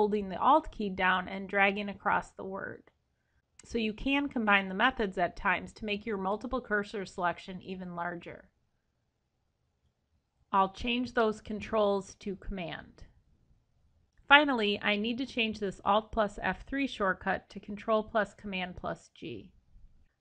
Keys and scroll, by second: 14.1 Escape, 16.9 ctrl+shift+Left.